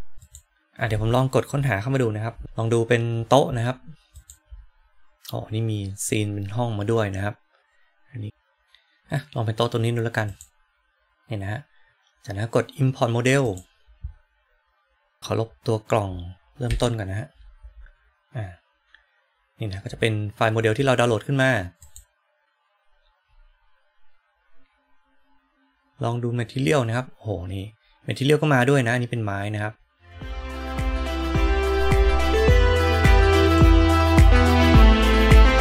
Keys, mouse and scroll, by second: 4.1-10.4 drag, 13.4-15.2 drag, 16.6 Delete, 31.1 click, 33.4-35.6 drag.